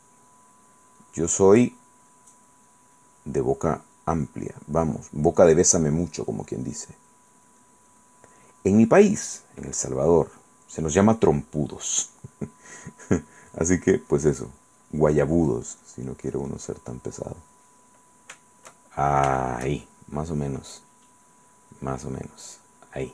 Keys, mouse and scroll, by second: 0.9 click, 1.6 click, 2.3 click, 3.2 click, 4.0 click, 4.5 click, 5.0 click, 6.1 click, 6.7 click, 7.1 click, 8.9-11.1 middle drag, 12.6 click, 13.4 click, 13.9 click, 15.7 click, 16.4 click, 17.5-18.5 drag, 18.6 shift+click, 19.4 shift+click, 20.9 click, 21.9 click, 22.7 click.